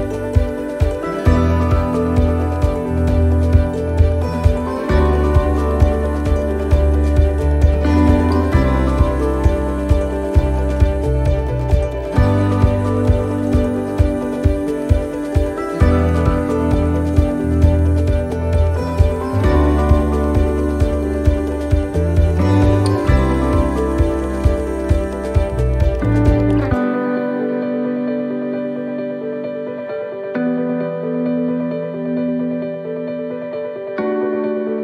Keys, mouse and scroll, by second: 4.2 ctrl+r, 11.9 middle click, 12.9 scroll up 1, 13.7 shift+middle click, 14.5 middle click, 15.5 scroll up 1, 16.3 ctrl+r, 18.8 shift+middle click, 19.5 ctrl+r, 21.3 scroll up 1, 21.4 middle click, 21.6 scroll down 1, 22.3 click, 22.9 right click, 23.7 shift+right click, 24.2 right click, 25.2 right click, 25.9 shift+right click, 26.0 shift+right click, 27.1 shift+right click, 27.4 shift+middle click, 28.2 shift+right click, 28.6 middle click, 29.8 shift+right click, 31.2 shift+right click, 31.5 shift+right click, 31.8 middle click, 32.3 scroll down 1, 33.8 scroll down 1, 33.9 e, 34.6 s.